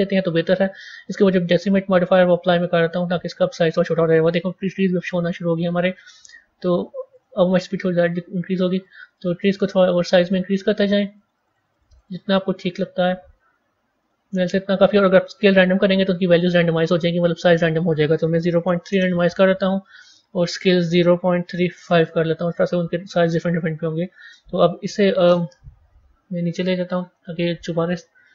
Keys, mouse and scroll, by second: 1.0-4.4 drag, 4.4-4.9 scroll up 1, 7.0-23.1 drag, 23.9-25.8 drag, 25.8 g.